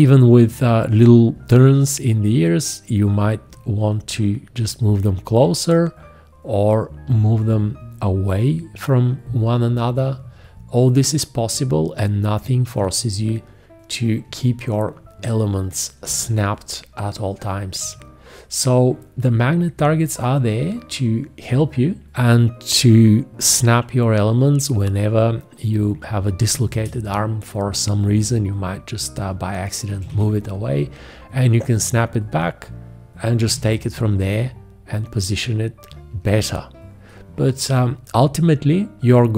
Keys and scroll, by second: 29.9 1, 30.1 `, 33.4 g, 38.2 F1.